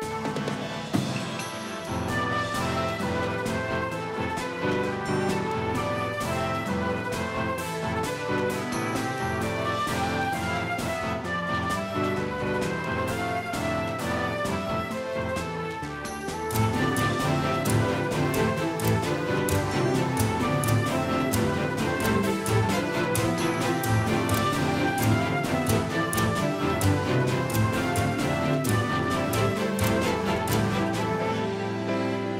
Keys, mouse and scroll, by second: 0.3-2.7 drag, 27.3 s.